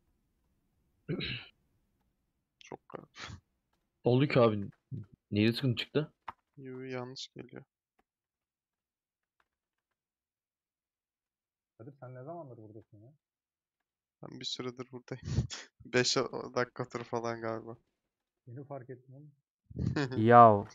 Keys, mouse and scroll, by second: 2.9-20.7 drag.